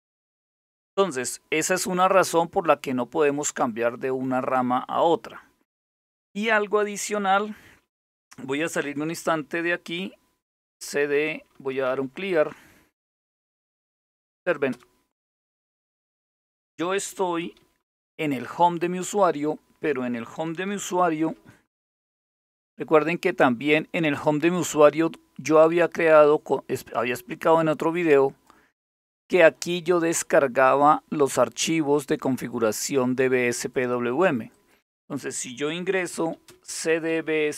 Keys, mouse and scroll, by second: 8.2-9.2 typing, 10.4 Return, 10.9-13.6 typing, 14.3 Return, 16.8-17.5 typing, 23.7 ctrl+click, 25.5-28.1 drag, 30.4-32.4 drag, 35.5-37.5 typing.